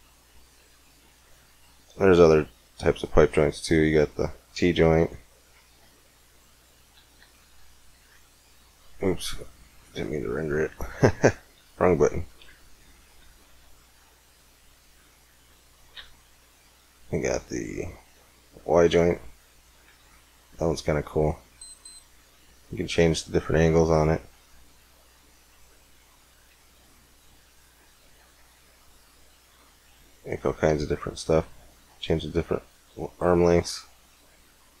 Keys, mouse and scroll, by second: 0.4-1.6 middle drag, 0.8 z, 0.8 x, 1.6 shift+a, 5.0-7.1 middle drag, 7.2 shift+z, 9.5-10.6 drag, 10.6 middle click, 11.4 Delete, 11.4 click, 14.6 z, 15.8 shift+a, 19.6 z, 19.9 click, 22.2-24.0 drag, 25.0-28.4 drag, 28.4 middle click, 29.2 middle click, 30.0 click, 32.7 x, 33.2 shift+a.